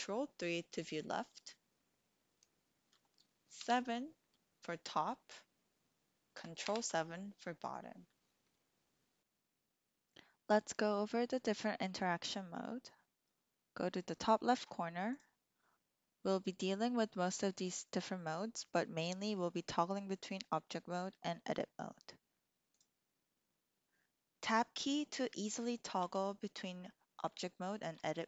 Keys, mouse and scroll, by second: 3.5 KP_7, 6.5 ctrl+KP_7, 15.4-22.2 drag, 22.7 click, 26.0 Tab, 28.0 Tab.